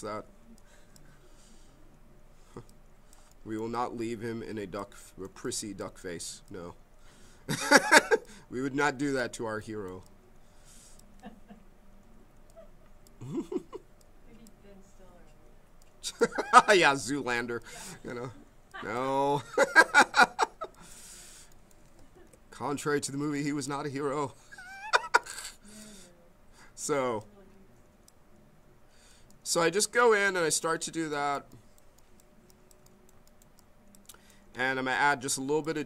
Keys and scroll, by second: 22.1 ctrl+z.